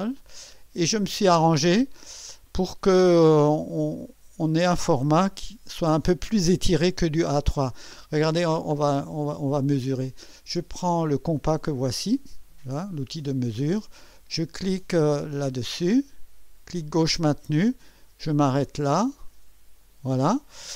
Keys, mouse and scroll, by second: 4.8 scroll up 2, 8.3-8.7 scroll up 2, 8.9 ctrl+scroll up 2, 9.8-10.2 ctrl+scroll up 4, 13.3 click, 16.8-20.2 drag.